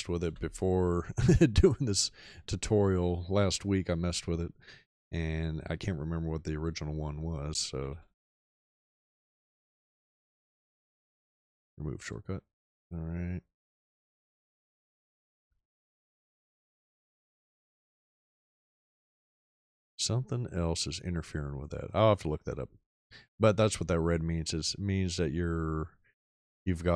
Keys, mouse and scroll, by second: 0.2 f, 7.6-9.1 typing, 16.7 BackSpace.